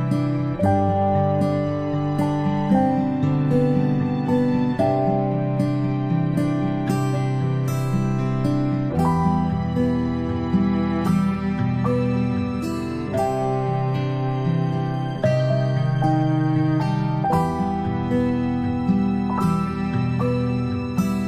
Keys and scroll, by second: 4.0 i, 5.0 v, 9.2 i, 11.5 v.